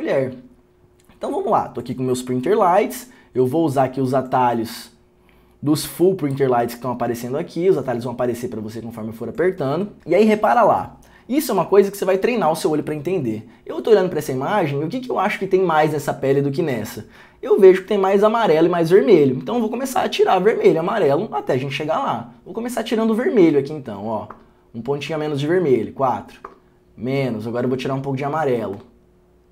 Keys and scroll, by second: 24.4 r, 26.6 4, 28.9 4.